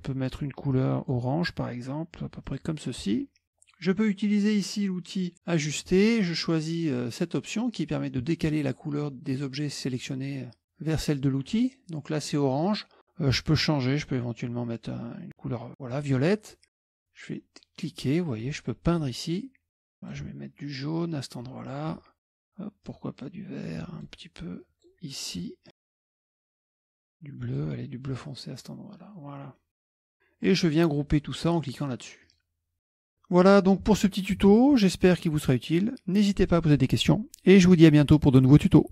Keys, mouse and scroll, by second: 0.8 click, 2.5 click, 5.3 click, 13.5 click, 14.4-16.3 drag, 16.9-19.6 drag, 19.8 click, 21.0-22.2 drag, 22.3 click, 22.9-24.4 drag, 24.6 click, 25.4 click, 26.3 click, 26.5 click, 27.1 click, 28.1-29.9 drag, 29.9 middle click, 30.0 click, 32.3 click, 32.9 click, 33.1 middle click.